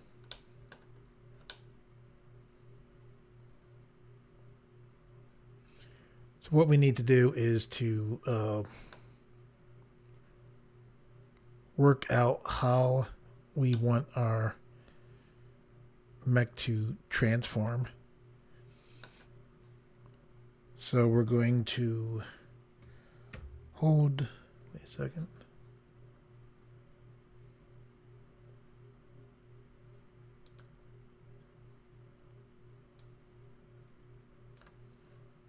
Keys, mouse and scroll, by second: 0.3 middle click, 1.0 scroll down 1, 1.5 middle click, 13.7 middle click, 30.5 click, 33.0 click.